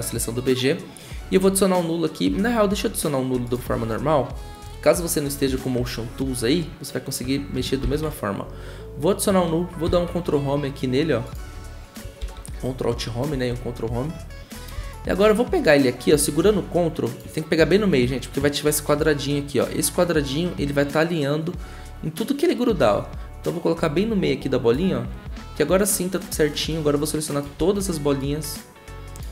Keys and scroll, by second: 7.8 ctrl+alt+shift+y, 9.8 ctrl+Home, 12.2 ctrl+alt+Home, 13.3 ctrl+Home, 27.6 ctrl+z.